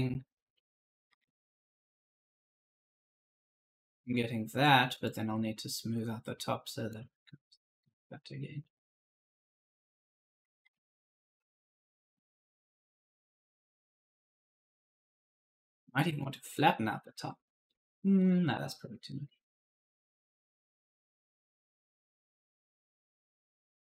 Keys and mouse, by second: 0.9 shift+F1, 2.2 click, 6.8 click, 10.9 right click, 11.0-12.5 typing, 12.3 right click, 14.0 click, 16.8-17.8 typing, 17.0 right click, 18.0 right click, 18.1 click, 20.3 click, 21.7 click.